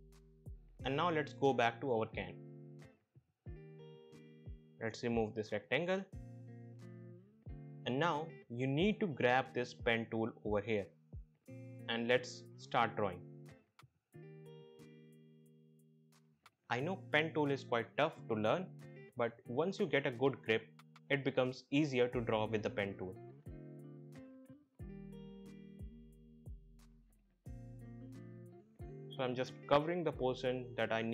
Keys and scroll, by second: 6.7 Delete, 19.9 ctrl+z.